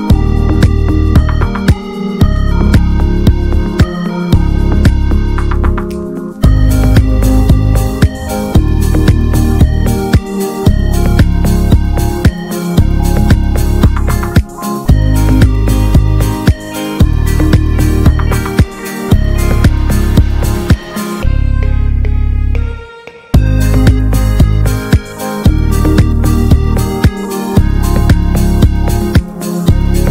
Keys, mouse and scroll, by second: 0.6 ctrl+z, 2.2-5.3 drag, 5.3 ctrl+z, 6.9-10.6 drag, 11.8 alt+h, 12.1-12.4 scroll down 2, 12.4 right click, 12.7 scroll down 2, 12.9 middle click, 13.0 scroll up 1, 13.3 middle click, 14.1-14.4 scroll up 1, 14.4 middle click, 14.6 scroll up 1, 15.2-17.2 middle drag, 17.2 click, 17.7-18.5 scroll up 1, 18.5-20.1 middle drag, 20.1 click, 21.0-21.3 scroll down 2, 21.3 shift+middle click, 21.8 ctrl+z, 26.6-28.9 drag, 29.6 ctrl+z, 29.8 scroll up 2.